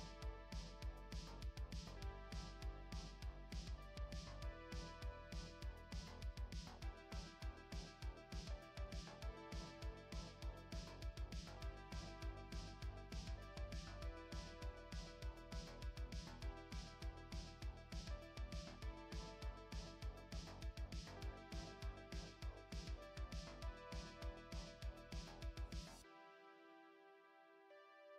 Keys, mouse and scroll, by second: 7.4 click, 11.6 click, 12.1 middle click, 15.9 shift+middle click, 18.2-18.9 scroll up 4, 19.0 middle click, 20.4 shift+middle click, 22.2 scroll down 1, 22.8 shift+middle click, 25.2 click, 26.8 KP_Decimal.